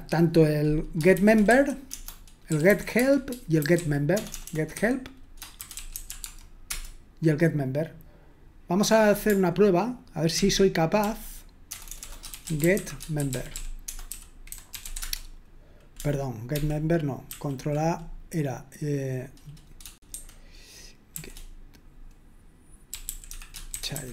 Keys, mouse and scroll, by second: 2.4-6.7 typing, 10.4 ctrl+p, 11.0 ctrl+p, 11.7 ctrl+BackSpace, 12.1-15.5 typing, 16.5 ctrl+p, 17.3 ctrl+a, 22.8-24.1 typing.